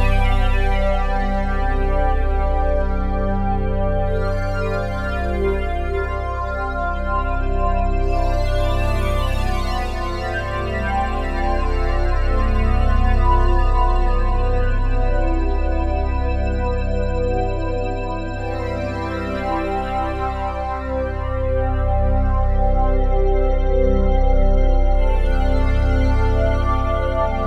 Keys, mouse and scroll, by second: 2.9-4.0 drag, 5.5-7.3 shift+drag, 9.2-10.0 ctrl+alt+drag, 10.2 alt+shift+click, 14.8 click, 16.1-16.8 drag, 19.5 x, 20.6 click, 21.3 g, 21.8 x, 23.3 click, 25.8 alt+shift+click.